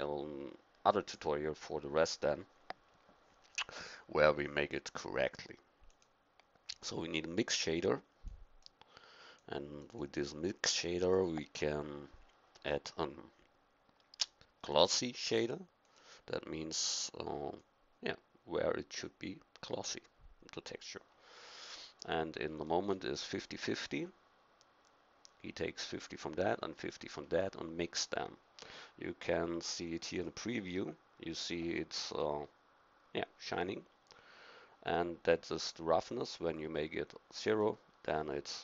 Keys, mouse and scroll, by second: 8.2-11.3 drag, 17.6-19.1 drag, 35.9-37.7 drag.